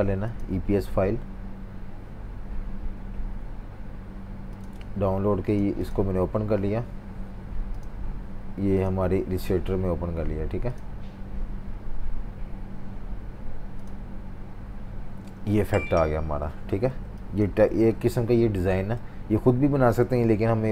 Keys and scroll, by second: 15.6 super+y, 16.1 super+y, 16.9 v, 17.8 super+z.